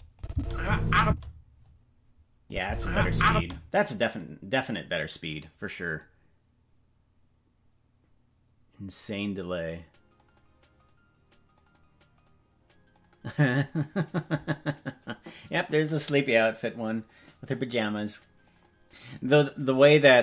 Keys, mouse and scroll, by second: 0.1-1.2 drag, 0.3 space, 1.0 space, 2.4 click, 2.6 space, 3.3 space.